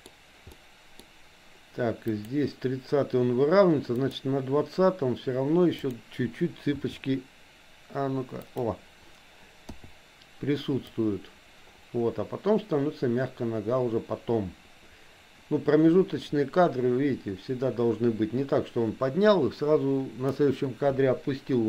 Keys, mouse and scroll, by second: 0.5 middle click, 2.2 click, 4.1 click, 5.7 click, 6.8 r, 9.7 i, 11.0-20.5 drag.